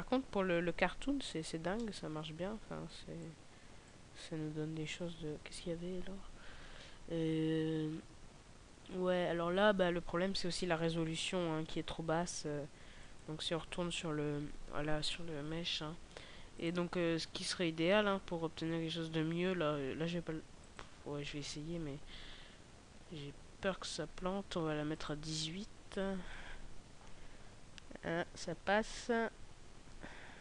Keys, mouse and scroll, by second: 1.4 scroll down 2, 1.6 middle click, 2.7 click, 3.7 click, 9.6 Escape, 10.8 KP_0, 13.0 right click, 16.4 click, 20.4 click.